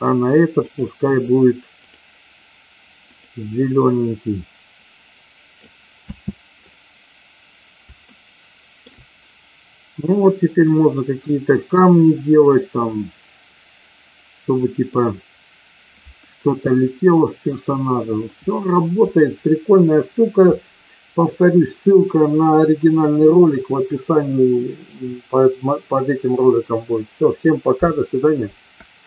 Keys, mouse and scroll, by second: 0.9 click, 1.8 click, 6.1 space, 8.1 shift+middle click, 10.6-15.0 middle drag, 16.7 middle click.